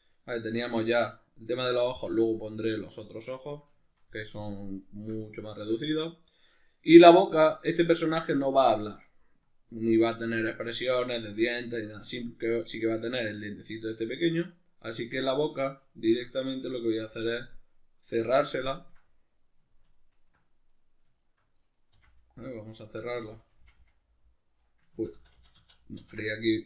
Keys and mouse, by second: 0.9 z, 2.2 z, 6.2 right click, 6.6-14.1 middle drag, 14.8 right click, 15.2-16.7 middle drag, 16.7 right click, 17.4 KP_Decimal, 17.7-20.7 middle drag, 20.7 right click, 21.2 shift+right click, 21.6 middle click, 22.0 f, 22.4 right click, 22.8-26.6 middle drag, 23.2 f, 25.0 ctrl+z.